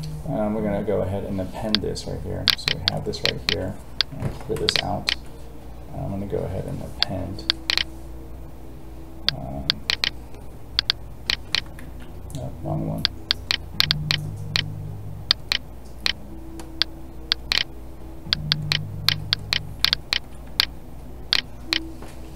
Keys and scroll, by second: 4.2 ctrl+n, 11.8 ctrl+z.